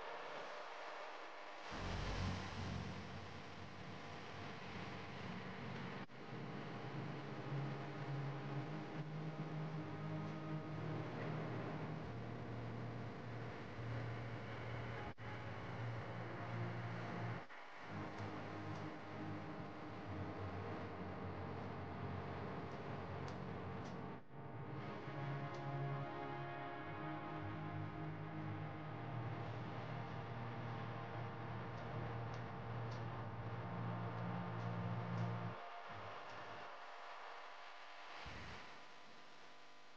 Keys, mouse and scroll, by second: 0.8 ctrl+z, 1.2-1.7 right drag, 1.9-3.5 middle drag, 3.5 click, 4.9 KP_1, 7.4 click, 7.9-9.3 right drag, 9.3 click, 10.1 click, 11.2 right click, 11.7 click, 12.2-14.3 middle drag, 16.7 KP_1, 17.3 click, 18.1-19.4 shift+middle drag, 19.4-21.3 scroll down 1, 21.3 ctrl+r, 28.8 ctrl+click, 29.5-31.4 middle drag, 31.4 ctrl+click, 31.9 middle click, 32.7 ctrl+click, 33.4-35.2 middle drag, 35.2 i, 39.3-39.9 scroll up 1.